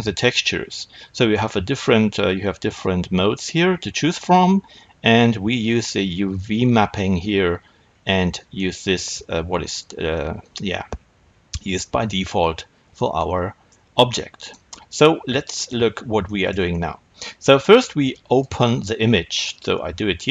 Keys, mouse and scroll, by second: 7.8-8.4 scroll down 2, 8.4-18.2 middle drag, 10.5-12.0 scroll up 2, 12.0-13.0 scroll up 1, 15.7-16.1 scroll up 2, 18.2-20.3 drag.